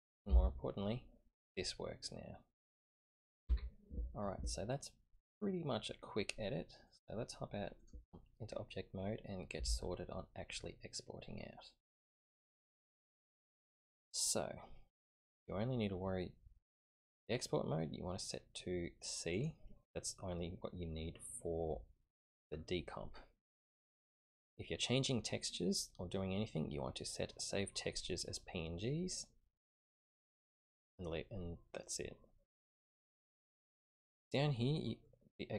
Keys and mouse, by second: 0.0 click, 0.3 g, 6.9-7.9 drag, 15.3-16.7 drag, 17.0 click, 18.2-19.4 drag, 29.1 click.